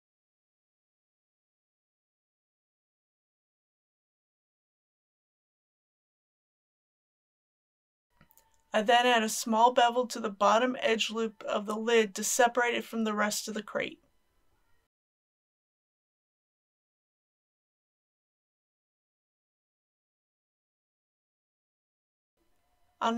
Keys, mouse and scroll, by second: 1.1 e, 1.4 z, 3.0 click, 6.6 Tab, 7.4 click, 7.8 middle click, 9.3 click, 10.6 Tab, 12.8 alt+click, 14.5-15.7 middle drag, 16.2 ctrl+b, 17.8 shift+click, 18.6 click, 19.8 KP_Decimal, 19.9 KP_0, 20.0 KP_1, 20.3 Tab, 20.5 KP_5, 21.5 click, 21.8 Tab, 22.0 click, 22.5 scroll down 1.